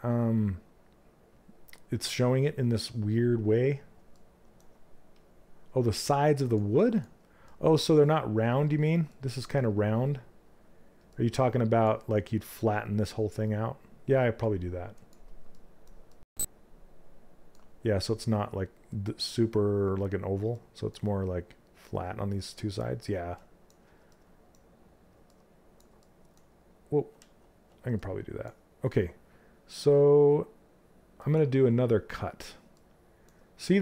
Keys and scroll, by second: 26.7 ctrl+z.